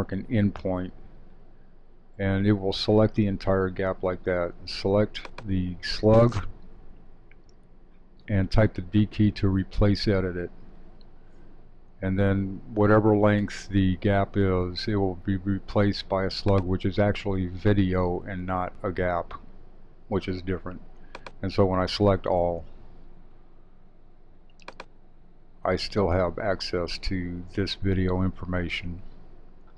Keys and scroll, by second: 22.1 super+a.